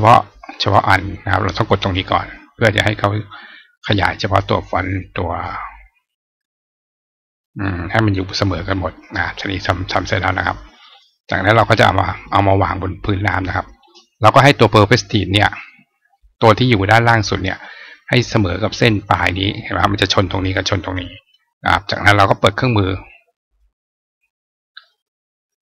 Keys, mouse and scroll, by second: 1.6 click, 3.0-5.2 drag, 6.3-7.3 drag, 9.8 click, 10.8 click, 11.5 click, 12.1-14.6 drag, 17.5-18.6 drag, 23.1 click.